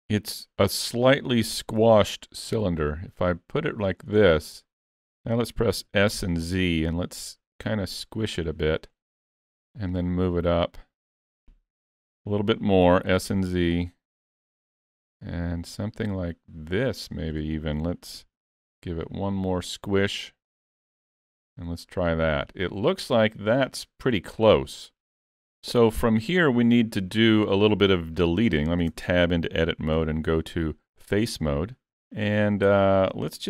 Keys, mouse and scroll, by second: 1.8 s, 4.2 shift+middle click, 5.8 s, 9.9 click, 12.9 s, 14.9 click, 18.1 s, 20.5 click, 25.6 scroll up 2, 25.9 shift+middle click, 29.0 Tab, 30.0 3, 31.9 alt+a.